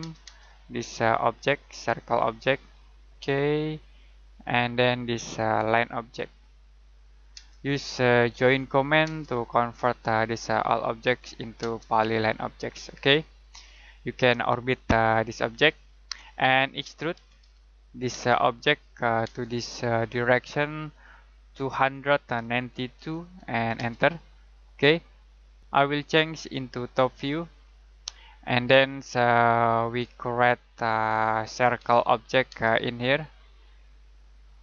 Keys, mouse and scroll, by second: 0.0-0.1 typing, 1.0 click, 1.8-2.3 scroll up 1, 2.3 click, 6.8 scroll down 1, 7.3 space, 7.8 middle click, 8.3 j, 9.0 space, 9.6 click, 11.6 space, 13.8 scroll down 1, 14.0 middle click, 14.5 middle click, 16.2 middle click, 16.8-18.1 typing, 18.3 click, 19.2 space, 21.5-23.7 typing, 24.5 scroll down 1, 24.7 middle click, 25.6 click, 28.1-28.5 scroll down 1, 28.5 middle click, 28.9 middle click, 30.0 middle click, 30.3-31.1 scroll up 1, 31.1 middle click, 31.7 c, 32.5 space, 34.0 click.